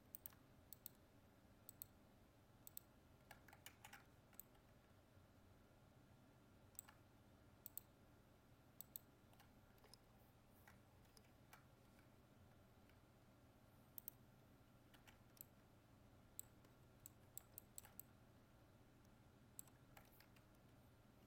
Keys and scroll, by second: 3.6 ctrl+z, 11.1 ctrl+f, 20.3 ctrl+Tab.